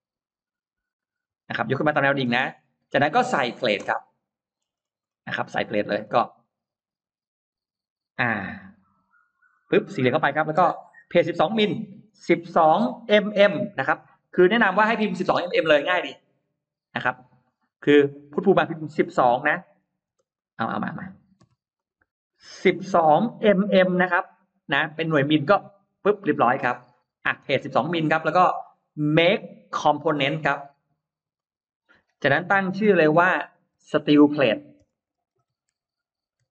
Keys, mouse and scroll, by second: 1.8 click, 2.2 space, 2.4-2.9 scroll up 1, 2.9-3.5 scroll down 2, 3.8 middle click, 4.4-4.7 scroll down 1, 4.9-5.9 scroll up 2, 6.0 middle click, 6.5 middle click, 6.9 middle click, 7.3 r, 8.0 click, 9.4 click, 10.8 click, 10.8-13.2 typing, 16.9 click, 19.0 1, 19.3 2, 20.0 space, 20.2 click, 21.4-23.6 typing, 21.6 click, 25.9 Return, 26.8 space, 27.9 click, 28.5 click, 29.1 right click, 31.2 click, 33.8-36.5 typing.